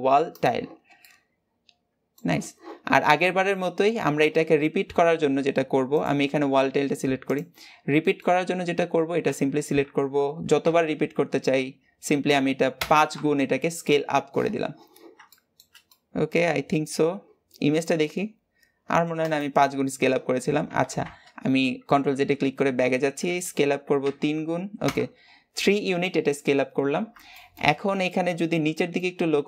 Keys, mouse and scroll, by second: 0.3 click, 0.7 scroll down 2, 0.8-2.6 middle drag, 2.6 scroll down 2, 2.9 middle click, 3.5-4.3 scroll up 1, 4.3 scroll up 1, 4.4 a, 7.2 click, 7.5-8.9 scroll down 3, 8.9-9.2 scroll down 1, 9.2 s, 15.1-16.4 shift+middle drag, 16.4-17.7 scroll up 2, 19.3 scroll up 2, 20.7 ctrl+z, 22.9 s, 27.2-28.3 shift+middle drag, 28.3 scroll up 2, 28.5 shift+middle click, 29.0-29.4 scroll up 3, 29.3 shift+middle click.